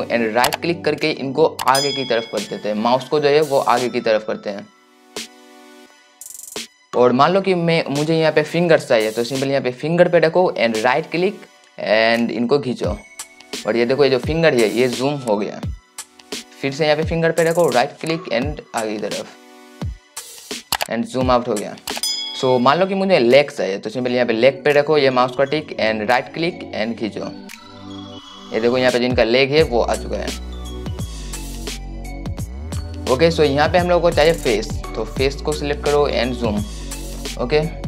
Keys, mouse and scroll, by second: 0.5-37.5 right drag.